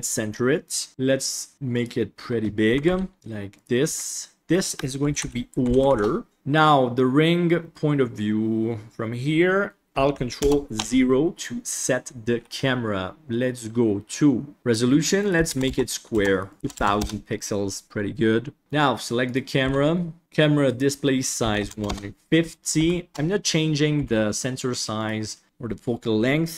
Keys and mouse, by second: 0.9 KP_1, 0.9 s, 2.6 g, 3.8 s, 4.4 F2, 6.3 ctrl+s, 6.3 middle click, 10.3 ctrl+alt+KP_0, 15.1-16.2 drag, 15.6 KP_0, 16.4 click, 16.5 KP_0, 16.7 KP_0, 19.2 click, 19.5 KP_3, 20.6 click, 21.2 click, 22.7 g, 23.1 KP_0, 23.9 g.